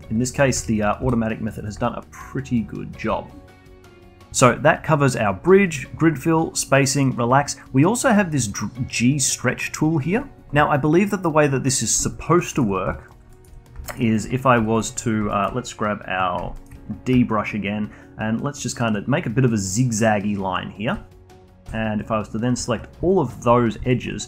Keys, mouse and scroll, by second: 0.9 1, 1.1 click, 1.4 g, 2.2-3.6 alt+drag, 11.7 middle click, 12.1 alt+click, 12.5 alt+middle click, 12.9 alt+click, 13.3 alt+middle click, 14.0-15.3 alt+drag, 15.3-17.1 alt+middle drag, 17.1-18.3 d, 18.4-20.9 drag, 20.9 d, 21.6 2, 22.0 click, 22.6 ctrl+click, 23.1 alt+click, 23.9-24.2 alt+middle drag.